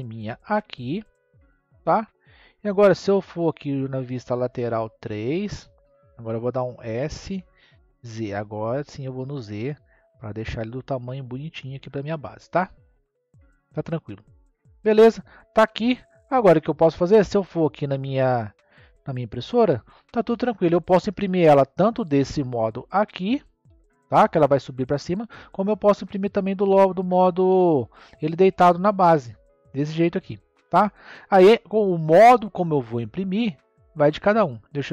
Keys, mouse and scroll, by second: 2.2-5.0 middle drag, 6.7 s, 14.5-15.6 middle drag, 16.8 click, 17.3-20.4 middle drag, 21.5-22.8 middle drag, 23.5-26.5 middle drag, 27.9 middle click, 32.9 click.